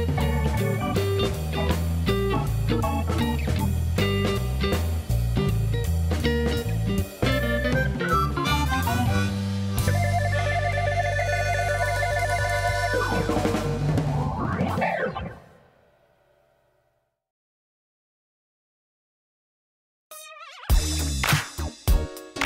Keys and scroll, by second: 0.8 3, 1.7 e, 2.4 s, 3.0 e, 4.9 ctrl+b, 9.6 Tab, 12.6 Tab, 14.1 ctrl+r, 16.8 shift+d, 17.5 Escape, 17.9 p, 18.7 Tab.